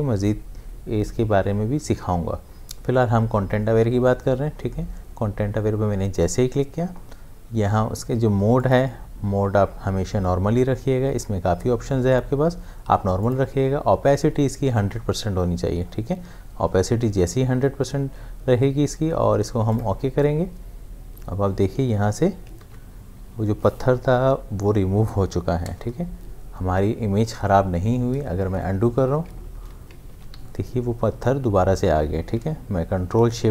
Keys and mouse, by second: 6.1 click, 8.6 click, 13.2 click, 19.7 click, 22.4 click, 22.6 ctrl+d, 25.4 ctrl+d, 28.9 ctrl+z, 29.4 ctrl+z, 30.1 ctrl+d, 30.4 v, 33.0 v.